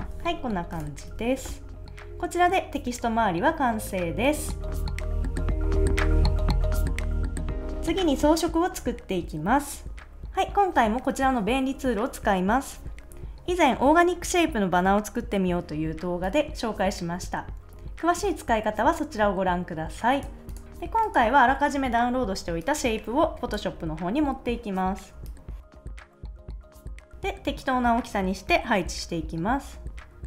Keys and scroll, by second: 1.1 super+s, 20.6 a.